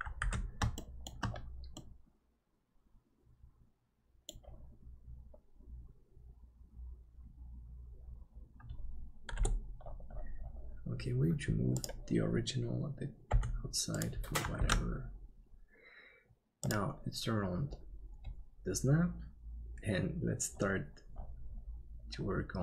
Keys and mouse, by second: 0.4 ctrl+s, 0.7 shift+middle click, 1.7-4.3 middle drag, 9.3 KP_7, 13.3 g, 14.7 ctrl+s.